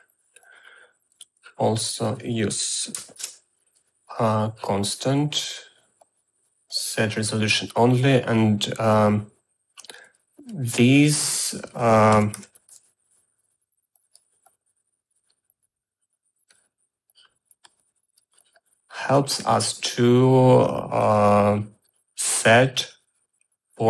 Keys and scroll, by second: 3.0 0, 3.2 Return, 12.2-13.3 typing.